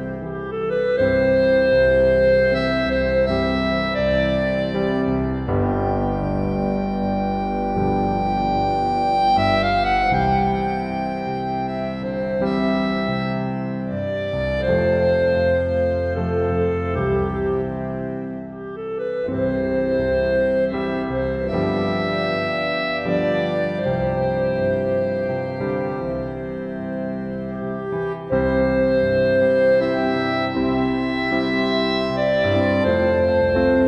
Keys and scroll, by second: 5.8 ctrl+t.